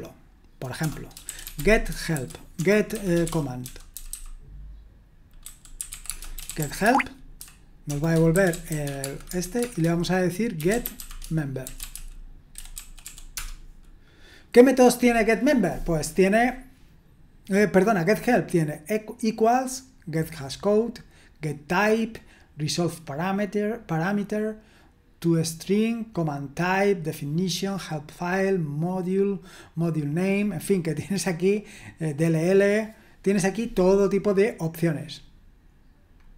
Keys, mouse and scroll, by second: 0.8-13.5 typing, 16.2-18.1 scroll up 1, 18.1-19.9 scroll down 1, 30.3-31.7 scroll down 1, 31.7-32.4 scroll down 1, 32.4-35.2 scroll down 1, 35.2-35.8 scroll down 1, 35.8-36.3 scroll down 1.